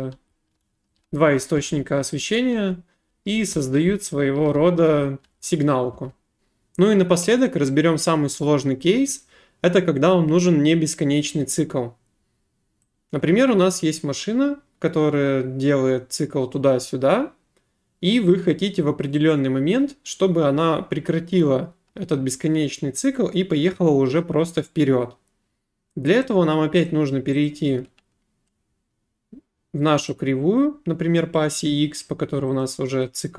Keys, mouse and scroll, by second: 6.4 click, 26.2 click, 26.9 click, 27.5 click, 30.1 click, 32.6 click.